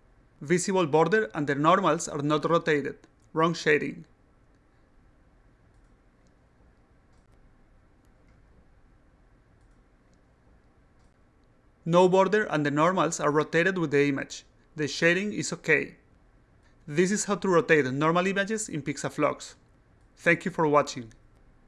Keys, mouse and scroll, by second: 4.3 click, 5.7-6.9 drag, 7.1 click, 7.7 click, 8.7-11.2 drag, 18.8 click.